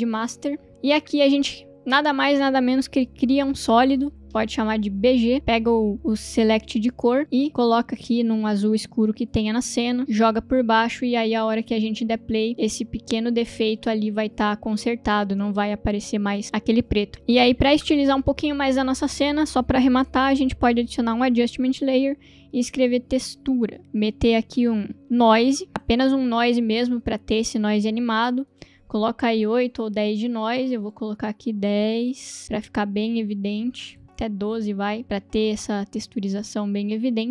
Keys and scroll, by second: 0.0-0.7 typing, 3.4 ctrl+y, 4.3-5.1 typing, 11.4 space, 20.8 ctrl+alt+y, 21.5 Return, 22.7-25.7 typing, 24.6 ctrl+space, 25.7 Return, 29.7 Return, 31.5-32.4 typing, 34.0 Return, 35.0 space, 37.2 space.